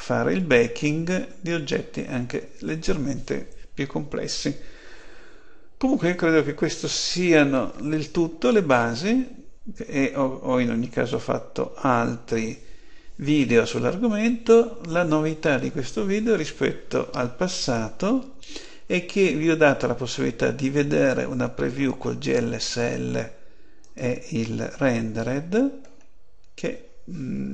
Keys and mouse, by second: 23.7 click, 25.1 click.